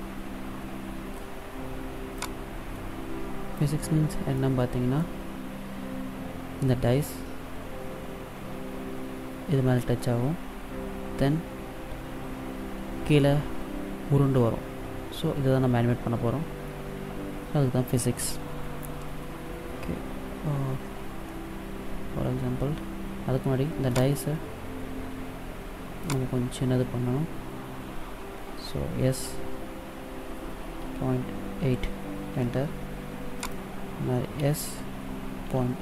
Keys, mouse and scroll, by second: 2.0 click, 4.2 middle click, 21.2 middle click, 23.9 right click, 24.2 right click, 26.1 right click, 28.7 s, 33.4 right click, 34.2 s.